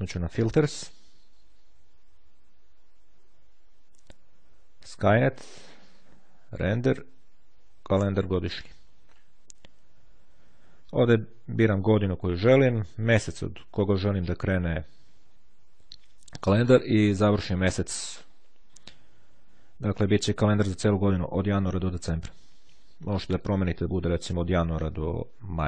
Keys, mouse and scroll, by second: 0.0-1.2 drag, 8.4 click, 23.6 click, 25.2-25.6 drag.